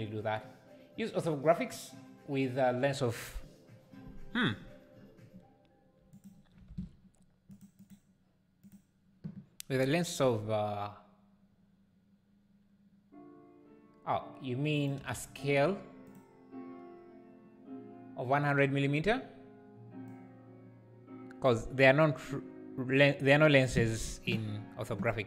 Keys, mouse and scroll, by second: 6.3 click, 8.7-16.1 drag, 20.3-23.0 drag.